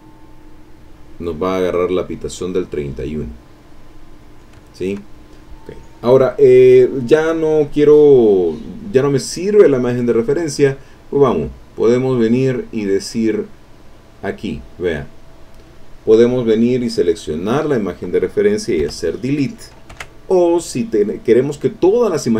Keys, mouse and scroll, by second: 0.3 click, 1.5 click, 3.3-4.4 drag, 4.7 ctrl+middle click, 5.2-5.7 ctrl+scroll up 3, 5.7-7.5 middle drag, 7.5 click, 7.8-11.7 scroll up 2, 11.7-12.6 scroll up 1, 12.9 click, 16.7 click, 17.0-17.5 scroll up 2, 17.5 click, 18.8 Delete, 19.9 ctrl+z.